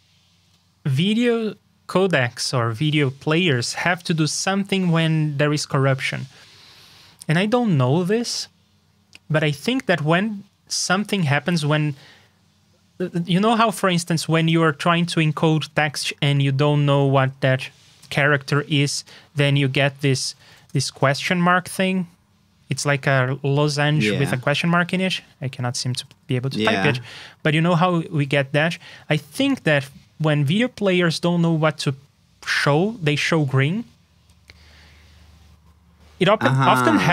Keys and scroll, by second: 17.9 ctrl+super+space, 28.7 super+s, 29.2 super+Tab.